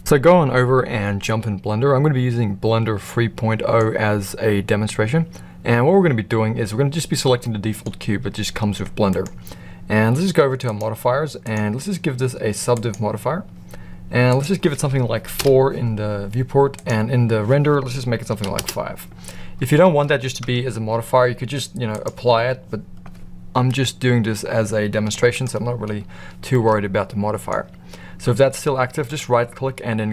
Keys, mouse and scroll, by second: 1.2-3.7 middle drag, 7.4-7.8 middle drag, 8.4 g, 11.5-12.9 drag, 14.3-16.1 drag, 16.7-19.0 drag, 20.5 Tab, 20.9 Tab, 21.9-22.6 drag, 25.4 right click, 26.5-27.4 middle drag, 29.0-30.1 right drag.